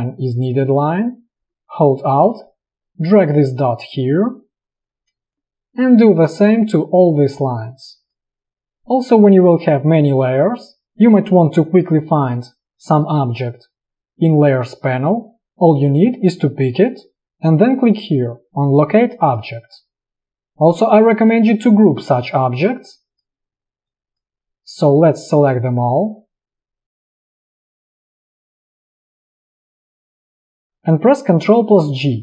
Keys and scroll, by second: 5.3 space, 20.3 space, 32.0 ctrl+g.